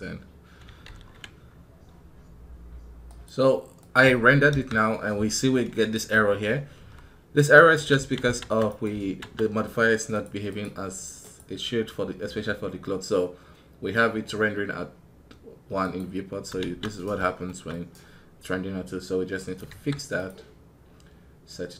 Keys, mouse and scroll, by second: 7.3 right click, 8.5 right click, 17.5-17.8 scroll up 3.